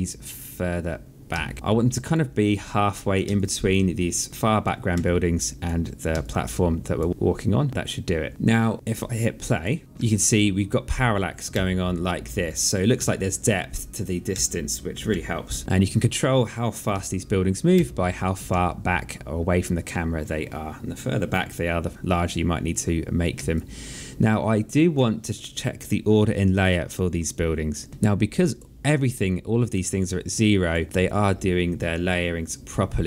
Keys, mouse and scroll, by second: 1.2 alt+click, 3.1 alt+click, 4.3 alt+click, 4.8 alt+click, 6.0 alt+click, 7.1 click, 7.7 click, 9.3 click, 9.8 Right, 11.3 Left, 11.3 Right, 12.7 Left, 12.7 Right, 14.1 Left, 14.1 Right, 16.7 Right, 17.5 Left, 19.5 click, 23.3 alt+click, 27.9 alt+click, 29.0 alt+click, 29.9 alt+click.